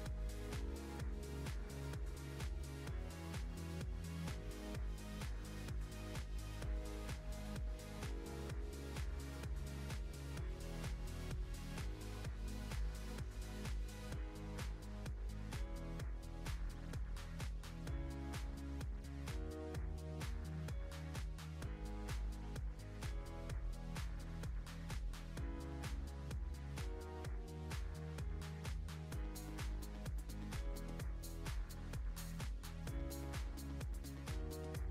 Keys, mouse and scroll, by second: 2.1 s, 9.4 scroll down 2, 10.0-12.3 shift+middle drag, 12.9-13.3 scroll up 2, 13.8 scroll up 1, 13.8 click, 17.5-18.5 shift+middle drag, 18.5 scroll down 2, 18.9-19.5 middle drag, 19.5-19.9 scroll down 3, 19.9-20.5 shift+middle drag, 20.5 scroll up 1, 21.2 Tab, 22.4-26.6 drag, 29.2 scroll up 1, 29.5 middle click, 30.0-30.5 scroll up 2, 30.6 shift+middle click, 31.5 ctrl+r, 33.7 b, 34.1 click, 34.7 s.